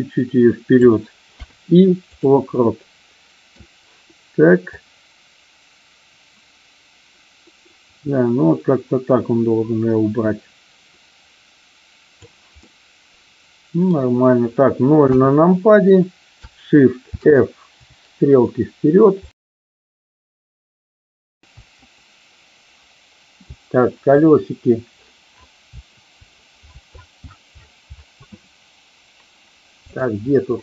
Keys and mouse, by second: 2.5-3.5 middle drag, 4.8-12.2 drag, 12.5-13.8 middle drag, 14.9 KP_0, 17.0 shift+f, 18.3-21.4 Up, 23.4 Down, 25.5 Up, 26.5-30.5 Up, 30.5-30.6 middle drag.